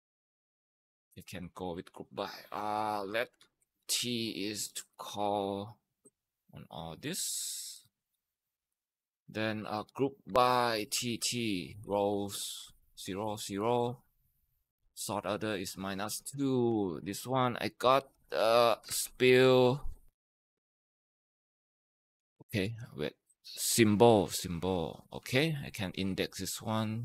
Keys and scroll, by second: 2.5-5.5 typing, 6.8-19.3 typing, 17.1 Return, 22.0 ctrl+x, 22.2 ctrl+x, 22.4 Return, 25.1 ctrl+v.